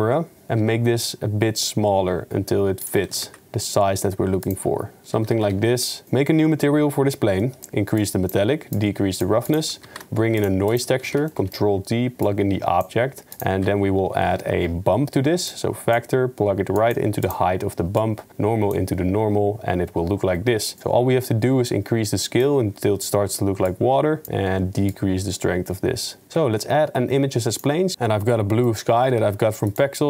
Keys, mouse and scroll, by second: 0.6 s, 3.0 g, 5.2 g, 24.3 n, 25.0 middle click, 26.3 shift+a, 28.3-28.7 drag, 29.0 g.